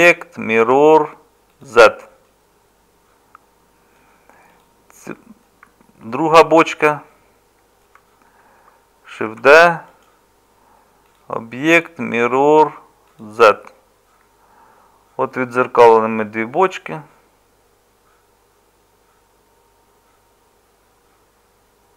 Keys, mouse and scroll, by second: 9.3 shift+d.